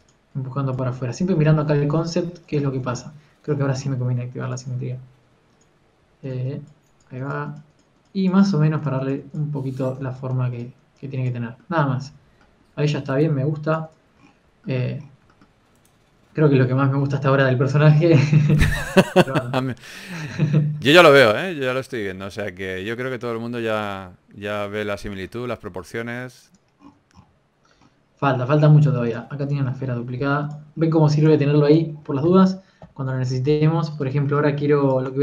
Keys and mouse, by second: 1.0 f, 1.9 click, 3.5 ctrl+z, 5.4-7.4 drag, 6.5 t, 7.1 f, 9.6 f, 11.0 ctrl+z, 11.2 f, 14.9 click, 15.1 a, 15.5 a, 15.9 a, 24.8 shift+a, 26.0 shift+a, 29.0 ctrl+2, 29.3 click, 29.8 x, 30.7 shift+d, 34.3 KP_1.